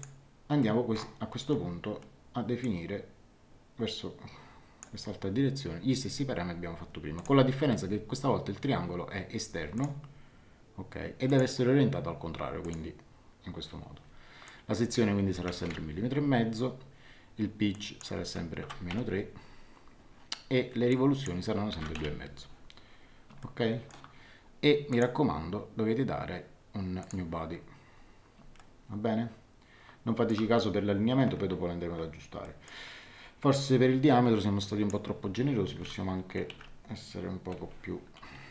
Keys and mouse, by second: 0.6 middle click, 2.6 click, 7.1 click, 9.7 click, 11.2 click, 12.6 click, 14.4 click, 15.7 KP_5, 17.7 click, 18.6 KP_Subtract, 18.9 KP_3, 20.9 click, 21.7 KP_2, 21.8 KP_Decimal, 22.0 KP_5, 23.4 shift+middle click, 24.9 click, 27.0 click, 28.5 shift+middle click, 32.4 middle click, 34.6 click, 36.4 KP_3, 36.5 KP_5.